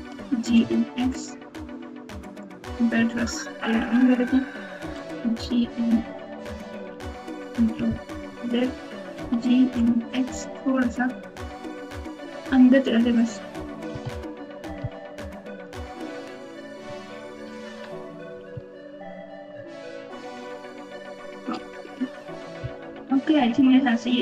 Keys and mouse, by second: 0.1 g, 2.9 s, 5.5 y, 6.5 x, 8.2 ctrl+z, 9.1 g, 13.9 alt+z, 15.1 ctrl+z, 15.6 ctrl+z, 16.8 ctrl+z, 17.1 ctrl+z, 17.4 ctrl+z, 18.5 alt+z, 19.5 Tab, 21.5 alt+z, 23.3-24.2 typing.